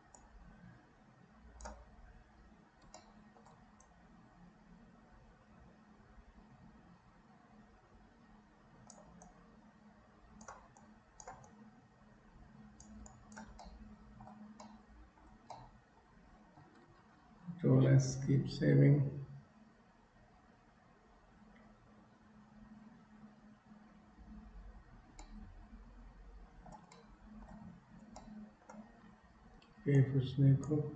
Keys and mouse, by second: 0.3-1.8 drag, 3.1 shift+middle click, 4.0-9.1 drag, 9.4-10.6 shift+drag, 10.7 shift+click, 11.7-12.9 drag, 13.2 shift+click, 13.7 middle click, 14.8 middle click, 15.5-16.6 shift+middle drag, 25.4-26.7 middle drag, 27.0 shift+middle click, 28.3 middle click, 29.6 k, 30.0 click.